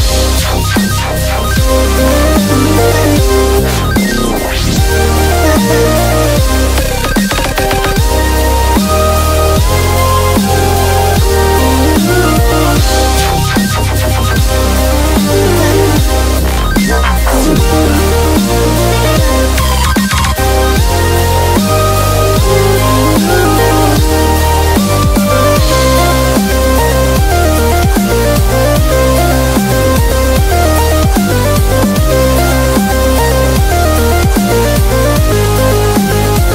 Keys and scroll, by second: 0.0-0.2 typing, 2.0-2.4 typing, 4.4-7.7 typing, 8.8-11.1 typing, 13.3 typing, 15.4 typing, 16.7-17.5 typing, 19.3 [, 21.0 ], 25.2-26.0 typing.